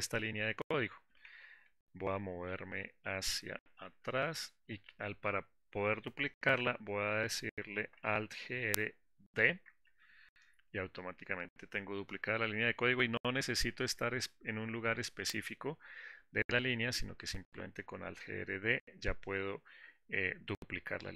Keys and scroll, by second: 9.7 super+d.